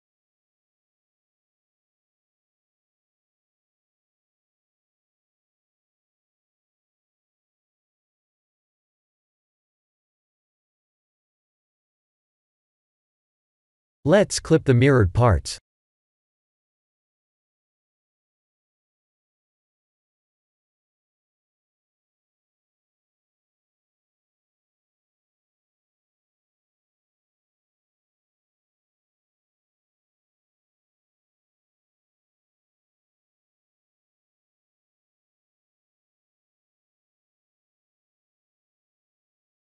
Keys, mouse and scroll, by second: 4.5 r, 5.6 Tab, 7.4 scroll up 4, 7.8 shift+middle click, 8.4-8.9 scroll up 3, 10.0 Tab, 12.7 a, 13.5 g, 15.4 click, 16.9 click, 17.6 click, 18.4 click, 21.0 g, 22.8 Tab, 23.6-25.7 scroll down 12, 29.0 KP_3, 30.3 middle click, 31.0-32.0 scroll down 8, 31.7 g, 33.5 KP_1, 34.9 KP_3, 35.5-36.6 scroll up 8, 38.0 shift+click, 38.6 shift+click, 38.9 g.